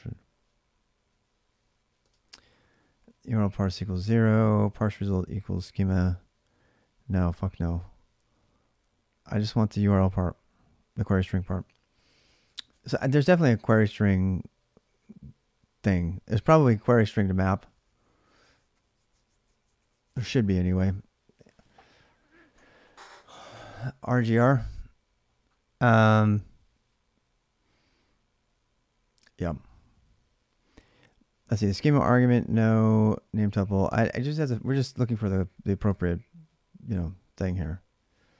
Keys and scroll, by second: 1.8 space, 11.9 space, 31.8 space, 33.6 space, 37.3 space.